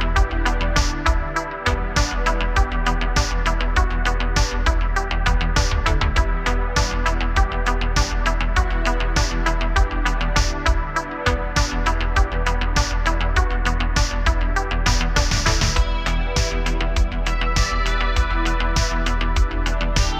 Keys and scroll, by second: 1.3 space, 4.3 BackSpace, 5.2 space, 5.5 a, 5.7 a, 7.4-8.2 typing, 12.3 typing, 13.9 BackSpace, 14.1 BackSpace, 17.5 space, 17.7 space, 18.3 space.